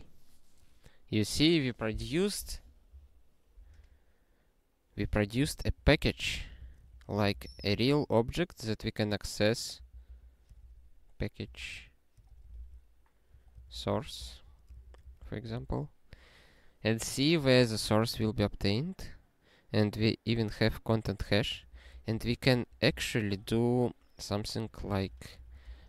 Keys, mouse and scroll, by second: 5.9 ctrl+p, 6.3 ctrl+p, 6.5 Return, 6.6-8.4 typing, 10.1-12.1 typing, 12.6 ctrl+alt+i, 13.2-14.5 typing, 14.8 alt+shift+s, 15.0 ctrl+n, 15.2 ctrl+n, 15.6 ctrl+e, 21.7 ctrl+p, 21.9 ctrl+p, 22.1 ctrl+p, 22.5 ctrl+p, 22.9 Return, 23.2 (, 24.5-25.8 typing.